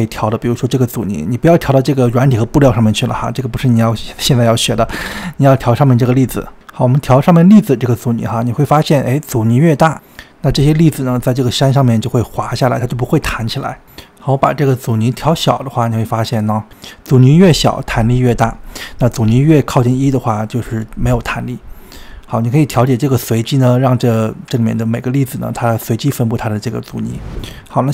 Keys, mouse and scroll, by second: 1.1-2.3 drag, 5.4-12.7 drag, 13.6-15.0 middle drag, 15.3-17.3 drag, 17.6-23.3 drag, 23.8-26.7 drag.